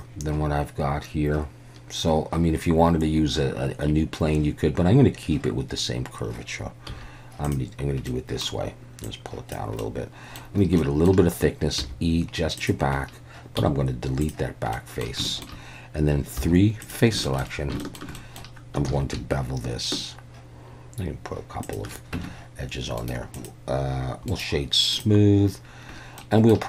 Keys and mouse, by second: 6.9 z, 8.1 middle click, 9.1 click, 9.8 middle click, 10.9 middle click, 11.8 e, 12.6 click, 13.6 x, 14.7 click, 15.3 shift+click, 16.4 3, 16.9 click, 17.3 shift+middle click, 17.8 shift+middle click, 18.2 middle click, 18.9 ctrl+b, 21.7 shift+click, 22.2 Tab, 23.0-25.0 right drag, 26.2-26.5 middle drag.